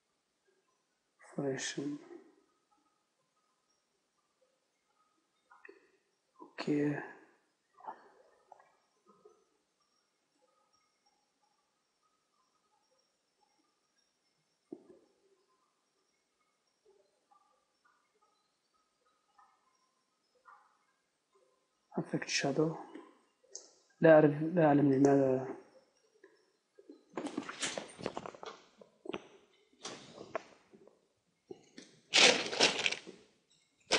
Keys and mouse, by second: 2.0-9.4 drag, 9.4 Tab, 10.6-16.7 right drag, 16.7 middle click, 17.3 middle click, 25.6-33.9 middle drag.